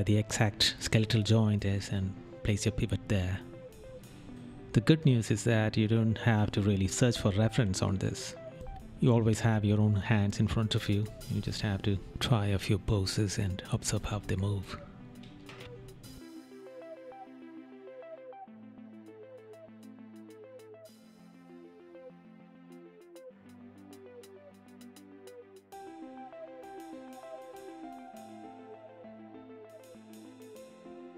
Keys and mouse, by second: 10.8 right click, 12.4 right click, 14.1 right click, 15.6 right click, 16.8 right click, 21.1 right click, 22.2 right click, 24.0 right click, 25.8 right click, 27.2 right click, 28.6 right click, 29.5 right click, 30.0 right click.